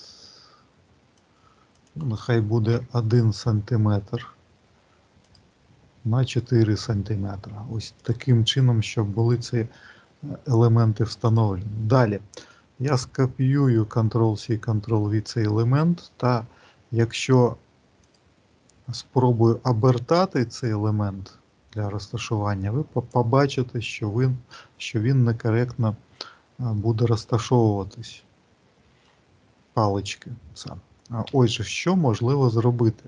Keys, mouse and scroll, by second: 1.7 click, 5.1 click, 6.1 click, 7.8 click, 11.2 click, 13.7 ctrl+c, 17.8 click, 20.5 click, 26.6 middle click, 31.1 Delete.